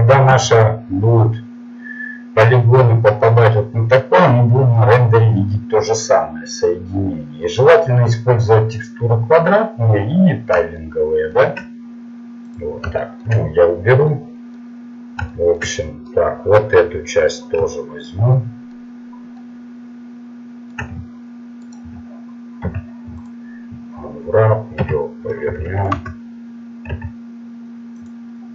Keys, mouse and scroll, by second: 7.9 click, 11.7 click, 14.0 middle click, 17.4 right click, 17.8-19.4 middle drag, 22.6 u, 24.8 r, 27.0 s.